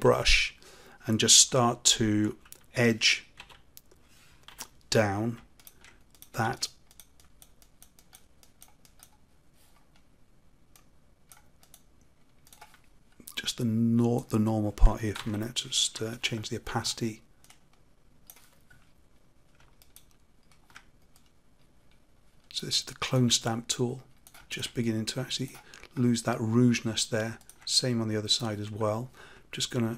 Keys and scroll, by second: 15.1 ctrl+z.